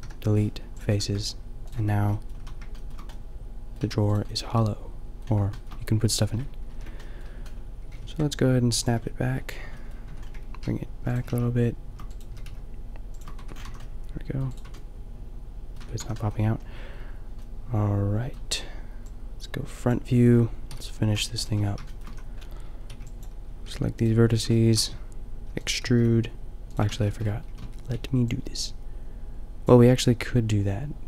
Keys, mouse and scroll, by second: 0.0 Delete, 0.9 Tab, 1.8 Tab, 2.4 a, 3.8 a, 6.8 ctrl+l, 7.9 g, 9.5 Tab, 10.2 Tab, 10.5 g, 11.3 g, 12.3 g, 13.4 Tab, 13.7 a, 14.7 Tab, 15.8 Tab, 16.1 a, 20.7 KP_5, 21.6 Tab, 22.2 a, 23.0 b, 23.7 g, 25.6 e, 25.8 g, 26.9 ctrl+z, 27.5 a, 27.9 b.